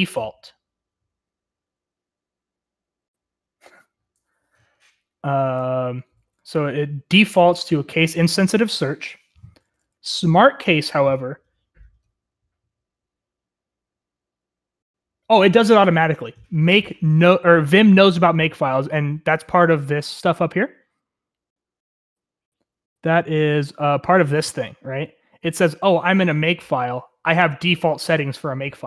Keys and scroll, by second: 6.0 typing, 9.0-9.9 typing, 20.0-21.5 k, 22.6 k, 22.9 k.